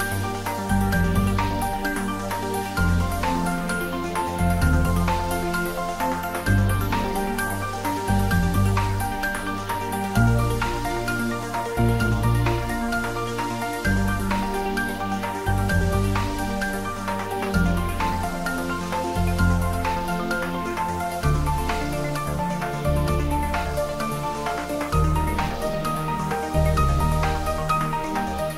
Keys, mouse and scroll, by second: 0.2 click, 0.7-2.0 scroll up 1, 2.0 click, 3.1 alt+shift+click, 4.9 shift+click, 13.4-13.9 scroll down 1, 13.9-14.6 middle click, 14.9 Tab, 15.7 scroll down 1, 16.4-17.0 middle click, 17.2-18.7 scroll up 1, 18.7-19.4 middle drag, 21.5 Tab, 21.8 click, 25.1-25.7 scroll down 1, 25.7-26.2 middle drag, 27.1-28.5 scroll up 1.